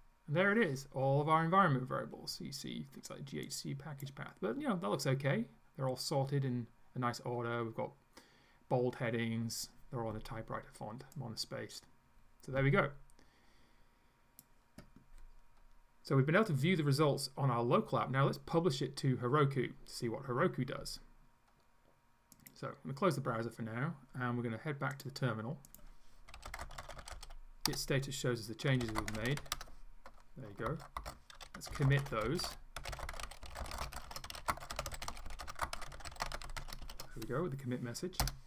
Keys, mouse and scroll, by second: 3.5 click, 4.3-4.8 scroll down 1, 5.0 scroll down 1, 11.2-14.6 drag, 22.4 click, 25.0 click, 25.7 click, 26.1-37.3 typing, 38.3 Return.